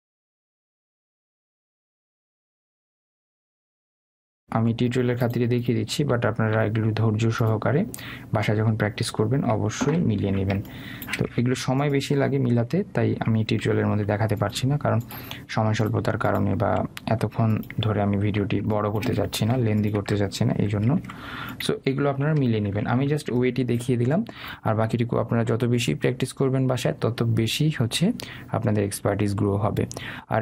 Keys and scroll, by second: 3.8 Left, 5.5 Down, 6.0 Left, 7.4 Down, 11.1 ctrl+space, 14.0 Left, 15.0 Up, 22.0 Up, 22.4 Left.